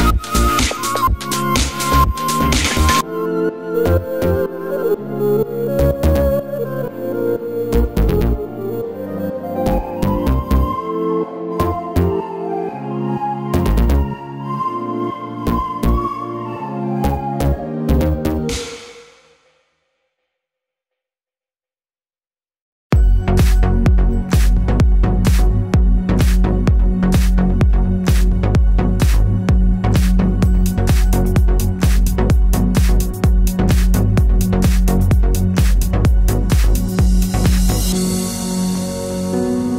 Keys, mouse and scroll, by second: 1.7 click, 1.8-3.4 middle drag, 2.3 g, 3.4 click, 3.7-5.4 middle drag, 3.7 scroll down 1, 4.7 g, 5.4 click, 5.5-6.1 middle drag, 6.1 click, 6.2 scroll down 1, 6.7-9.7 middle drag, 7.1 KP_0, 8.0 z, 9.7 click, 10.4 r, 12.5-39.1 drag, 13.1 r.